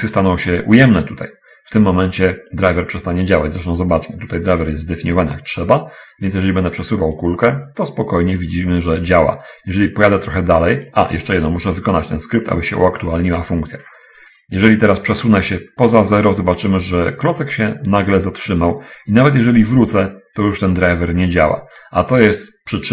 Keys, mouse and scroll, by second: 3.9 right click, 6.6 right click, 7.5-11.2 drag, 12.4 click, 14.3-17.4 drag, 18.7-22.3 drag.